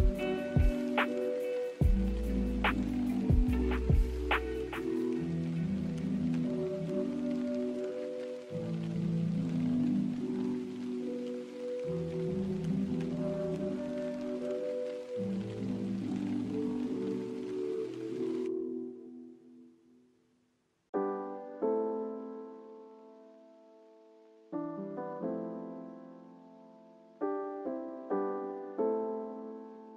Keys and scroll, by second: 14.8 s, 25.1 n, 28.9 a.